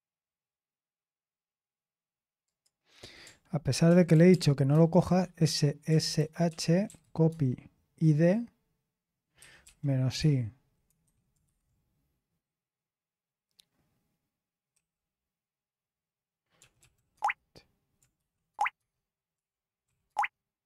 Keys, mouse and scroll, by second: 0.2-2.4 scroll down 1, 2.4 click, 3.9 ctrl+p, 4.1 ctrl+p, 4.3 ctrl+p, 4.7 ctrl+c, 5.1-7.5 typing, 9.6-10.1 typing, 16.3-19.8 typing.